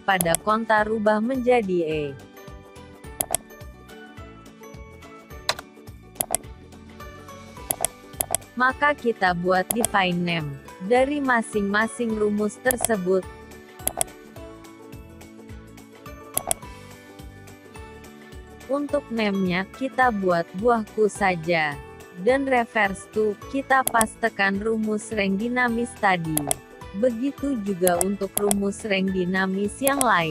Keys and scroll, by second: 10.4 ctrl+x, 24.0 ctrl+v, 30.2 ctrl+x.